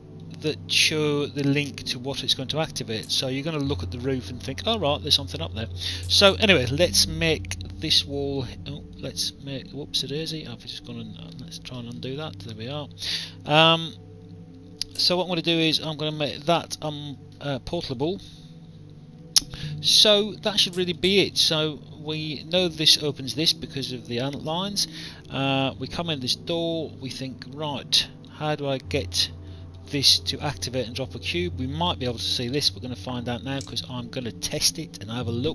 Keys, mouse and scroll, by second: 2.5 alt+click, 5.3 alt+click, 8.0 alt+click, 11.3 ctrl+z, 12.2 alt+click, 14.8 click, 16.3 p, 17.5 alt+click, 18.3 alt+middle click, 19.8 alt+right click, 20.6 alt+click, 24.7 alt+click, 26.6 alt+click, 29.5 alt+click, 30.6 alt+click, 33.4 click.